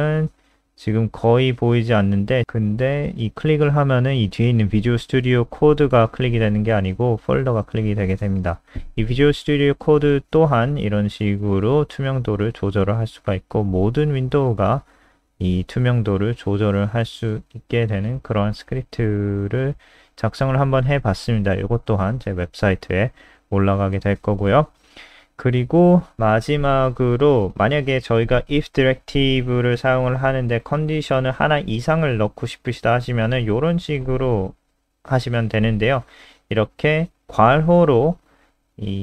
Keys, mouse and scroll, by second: 15.3 right click, 16.2 click, 19.4 click, 19.8 scroll down 2, 19.9 ctrl+alt+r, 19.9-20.3 scroll up 1, 20.7 click, 20.8-21.6 scroll up 1, 21.6 click, 22.5 Right, 25.5 shift+click, 26.0 ctrl+c, 26.3 click, 27.3-27.7 scroll up 2, 27.7 click, 28.5 Right, 29.1-29.9 scroll down 7, 29.9 shift+click, 30.6 ctrl+v, 30.8-31.1 scroll up 1, 32.1 ctrl+s, 32.1-33.1 scroll up 7, 34.3 click, 38.3 shift+Left.